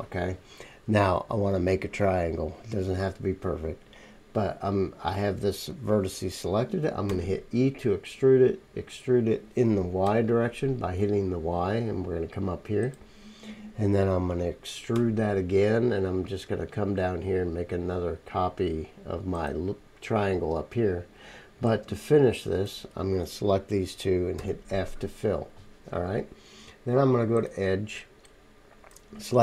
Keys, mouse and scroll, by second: 7.1 e, 8.1-10.1 middle drag, 14.9 e, 16.4-17.9 middle drag, 19.7-24.7 drag, 21.7-24.7 middle drag, 21.7-24.7 right drag, 24.4 f, 27.4 click, 27.4 middle click, 27.4 right click.